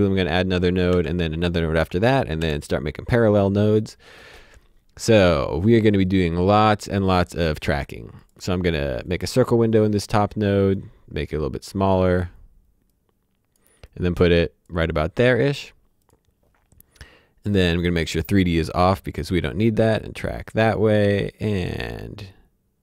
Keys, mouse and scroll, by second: 0.9 s, 2.4 p, 6.3 click, 9.9 click, 16.0 click, 19.3 click, 21.4 click.